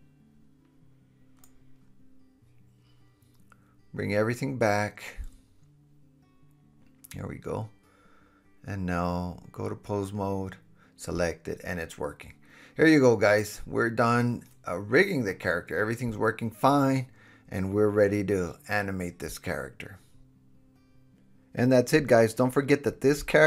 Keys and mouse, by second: 7.7-10.9 middle drag, 8.1 h, 8.6 h, 10.9-11.5 drag, 11.5 middle click, 11.9-18.1 drag, 13.7 super+z, 16.2 super+z, 18.1 super+z, 18.7-22.4 middle drag, 22.4 click.